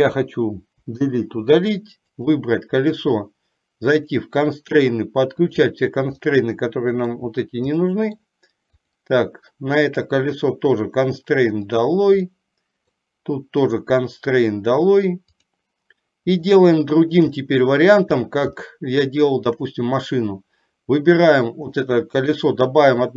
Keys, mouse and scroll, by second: 1.0 Delete, 2.2 click, 4.1 click, 5.6 click, 6.5 middle click, 8.1 middle click, 8.9 click, 10.0 click, 11.9 click, 12.5 middle click, 13.9 click, 15.4 click, 16.6 shift+middle click, 17.6 middle click, 18.9 shift+middle click, 22.0 shift+middle click.